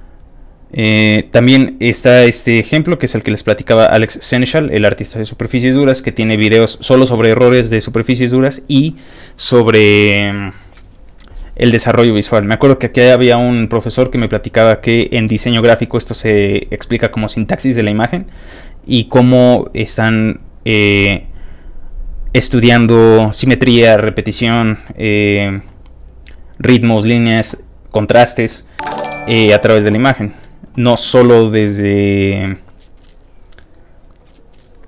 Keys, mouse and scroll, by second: 0.4 click, 1.2 middle click, 1.3 scroll down 1, 1.6 middle click, 2.3 middle click, 2.3 middle click, 2.9 middle click, 5.4 middle click, 6.0 middle click, 6.6-10.9 middle drag, 18.7 middle click, 19.5 middle click, 20.1 middle click, 21.0 middle click, 24.7 middle click, 25.2 middle click, 25.8 middle click, 26.0 scroll down 1, 26.2 scroll up 1, 26.3-26.6 scroll down 2, 27.1-28.1 scroll up 4, 32.1 scroll down 1, 33.0 scroll up 1, 34.0-34.8 scroll down 2.